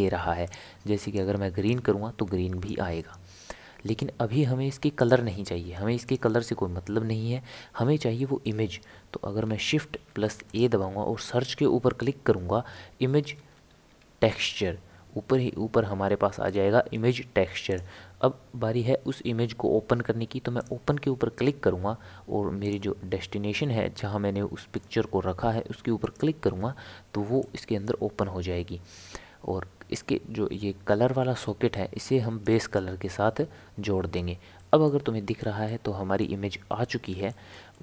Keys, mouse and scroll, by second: 8.2-9.9 middle drag, 9.9 shift+a, 20.6-23.7 drag, 27.4 click, 29.9 click, 34.6-35.0 middle drag, 35.0-35.7 scroll up 4, 35.7-37.8 middle drag.